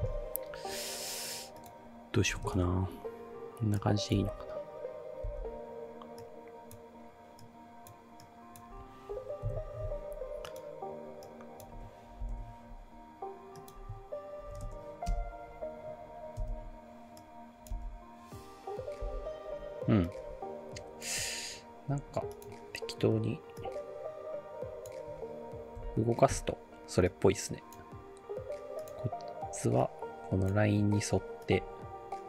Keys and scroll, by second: 2.1-2.9 typing, 4.2 space, 5.3 space, 9.4 F9, 12.2 ctrl+shift+k, 14.2-15.0 typing, 16.4 space, 17.7 space, 19.1 space, 25.8 p.